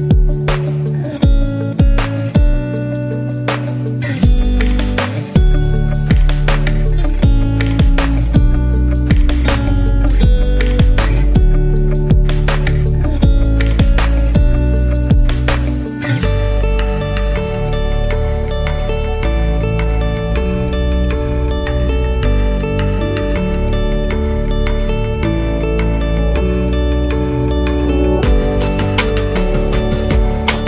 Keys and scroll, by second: 1.1 v, 8.1 v, 12.6 super+-, 12.7 super+-, 13.9 z, 14.9 v, 15.7 space, 16.2 space, 16.8 super+-, 20.1 z, 20.8 v, 27.2 super+-, 27.3 super+-, 29.3 super+-, 30.1 space.